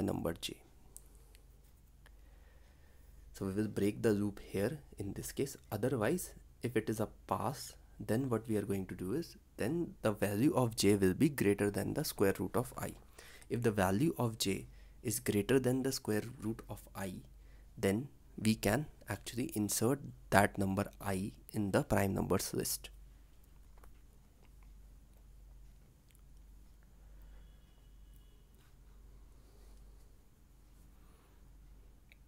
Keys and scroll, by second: 5.1 ctrl+s, 30.4 ctrl+c.